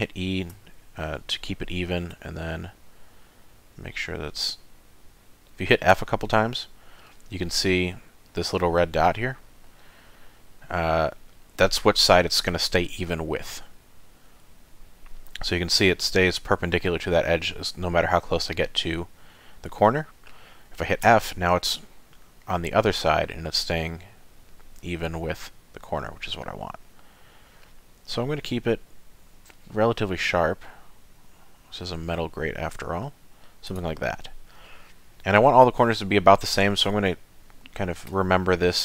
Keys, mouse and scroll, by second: 34.5 middle click, 35.4-35.8 scroll up 2, 36.0-36.5 scroll down 2, 36.5 middle click, 37.1 ctrl+middle click, 38.2 middle click.